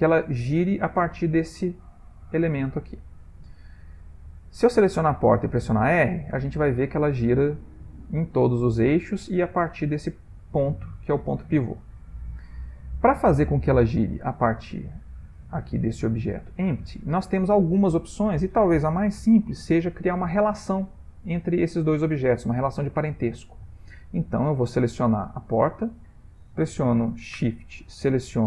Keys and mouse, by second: 1.2 click, 2.0 g, 3.2 click, 5.3 r, 7.6 r, 11.0 shift+middle click, 11.7 ctrl+middle click, 13.5 shift+middle click, 13.5 shift+middle click, 13.6 shift+middle click, 13.9 shift+middle click, 14.9 click, 15.7 g, 25.2 click.